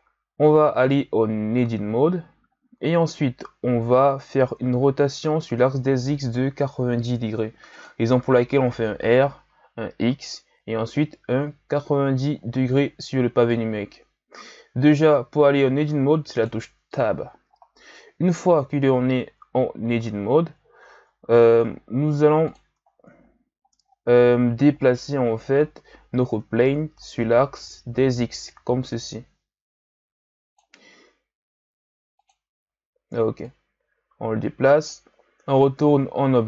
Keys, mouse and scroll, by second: 0.3-1.3 shift+scroll up 2, 1.3 scroll up 1, 1.5 Tab, 2.5-4.9 shift+scroll up 3, 4.9 r, 17.7-18.3 scroll down 1, 18.3-19.1 scroll up 2, 19.1-20.2 scroll down 1, 20.2-21.0 scroll down 3, 21.0-21.7 scroll up 2, 21.7-22.4 scroll down 2, 22.4 click, 22.8-23.2 ctrl+scroll down 2, 23.2-24.9 scroll up 6, 24.9 shift+c, 25.7-26.6 scroll down 4, 26.6-27.3 ctrl+scroll down 3, 27.4-28.4 ctrl+scroll up 3, 28.4-31.5 drag, 32.2 click, 33.4-35.5 drag, 35.5 Tab.